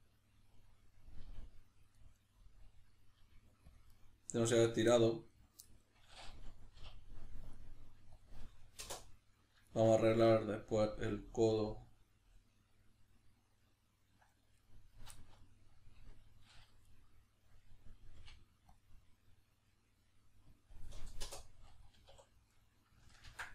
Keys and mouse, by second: 1.2 g, 1.8 click, 2.0-3.8 middle drag, 3.2 g, 3.8 click, 3.9-22.5 middle drag, 6.8 k, 18.2 k, 22.5 right click, 23.3 ctrl+x.